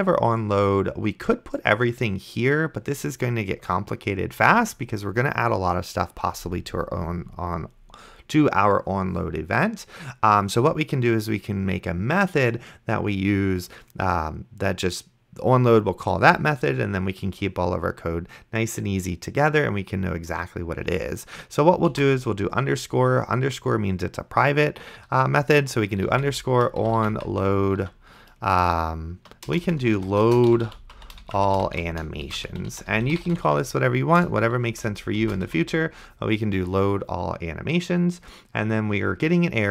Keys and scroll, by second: 4.7 BackSpace, 22.2 shift+-, 26.1 o, 26.5 n, 27.0 o, 27.8 d, 29.5-35.5 typing.